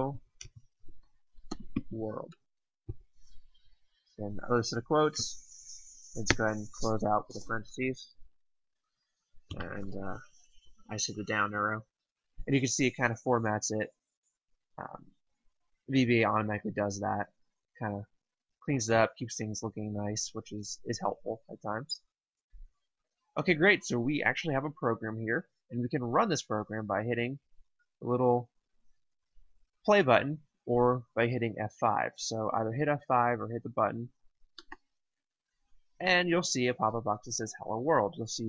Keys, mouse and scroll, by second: 0.0-2.3 typing, 4.8 typing, 6.2-6.7 typing, 9.4 Down, 34.5 click.